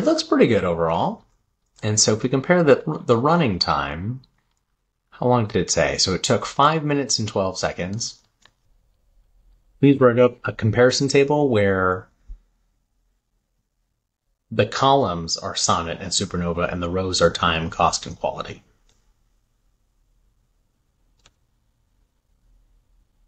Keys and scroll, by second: 8.0 super+c, 20.6 super+v.